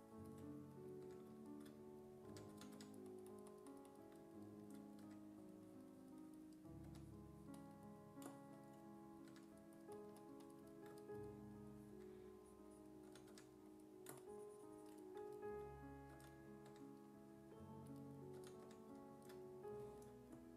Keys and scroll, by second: 1.1 1, 2.1-3.3 typing, 5.1 1, 6.9 1, 9.3 1, 11.9-13.8 typing, 16.2 s, 16.7 1, 18.4 s, 18.7 1.